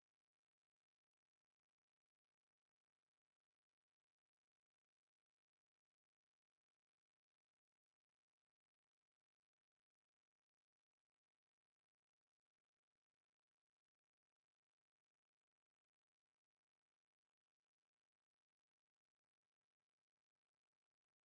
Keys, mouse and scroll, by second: 0.7 click, 2.8-9.3 drag, 12.9 click, 14.8 middle click, 16.3 e, 16.9 click, 17.8 Tab, 17.8-19.6 middle drag, 19.8 middle click, 20.0 KP_7.